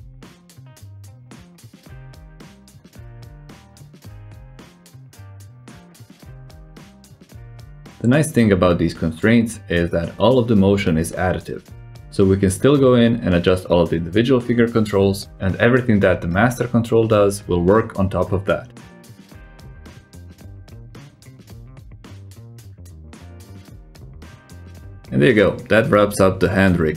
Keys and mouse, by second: 3.1 r, 4.8 g, 5.7 r, 6.7 g, 7.9 middle drag, 8.2-8.8 drag, 8.9 g, 11.6 r, 11.9 alt+z, 12.1 click, 12.8-13.2 drag, 13.4-14.0 drag, 14.2 r, 18.1 g, 20.1-20.5 drag, 20.8 click, 21.2 g, 22.6 r, 23.7 click, 25.5-26.1 drag, 25.5 r, 26.3 g.